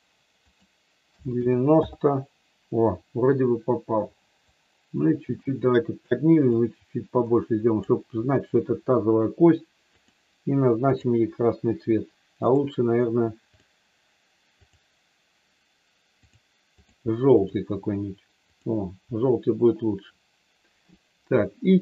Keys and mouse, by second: 0.3-2.5 drag, 4.5-6.1 drag, 6.5-7.9 drag, 10.0 click, 12.5 click, 13.6 click, 14.7 click, 16.2 click, 16.7 click, 17.3 click.